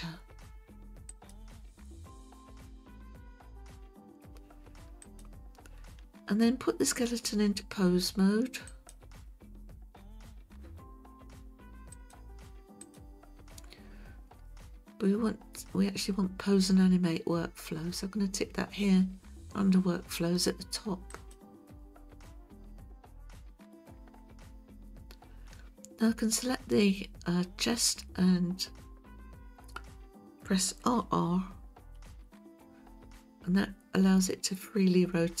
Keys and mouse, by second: 1.1 click, 5.0 click, 8.7 click, 11.9-13.0 drag, 21.3 click, 32.0 r, 32.2 r.